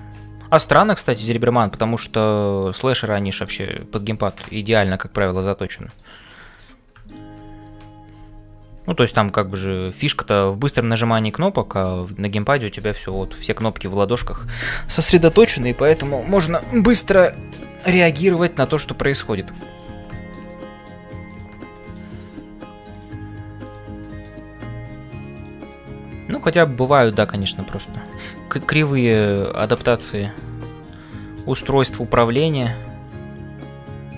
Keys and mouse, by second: 0.0-34.1 typing, 1.2 shift+middle click, 1.9 middle click, 3.4 click, 3.9 middle click, 6.5 click, 7.0 shift+click, 10.1 middle click, 11.3 click, 18.4-19.7 middle drag, 20.1 shift+middle click, 20.5 middle click, 21.2 click, 21.9 middle click, 23.7 click, 24.1 middle click, 25.7-26.8 middle drag, 30.2 middle click, 30.6 middle click, 32.0-34.1 middle drag.